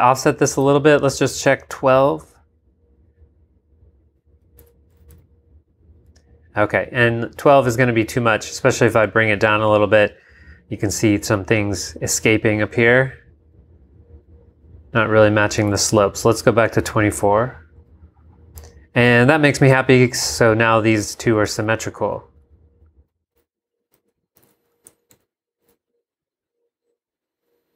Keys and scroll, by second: 0.6 super+Tab, 4.7 super+Tab, 5.1 super+v, 5.7 v, 15.8 super+Tab, 21.6 super+Tab, 22.3 super+v, 23.7-26.1 typing.